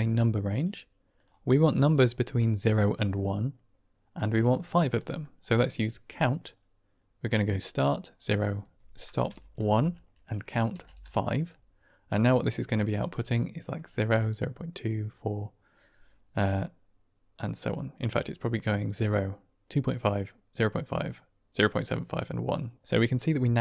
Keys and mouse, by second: 1.9 click, 5.1 click, 6.0 click, 8.3-11.4 drag, 12.9-13.7 drag, 23.2-23.6 middle drag.